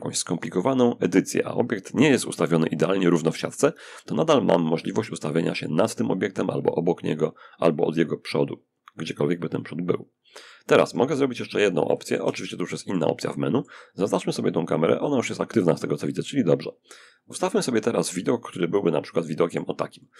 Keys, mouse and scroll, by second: 10.8-13.4 shift+middle drag, 14.4 click, 17.2-20.1 middle drag.